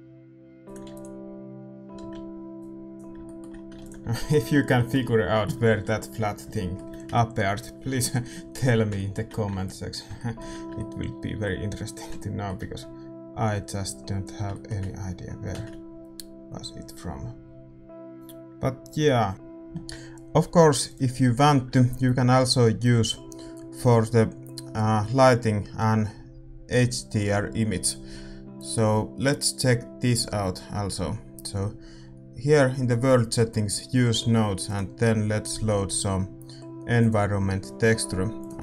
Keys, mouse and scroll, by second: 0.7-16.4 drag, 0.7 shift+z, 2.6 ctrl+s, 3.2-13.9 middle drag, 14.5-16.4 middle drag, 16.4 shift+z, 19.3-38.6 drag.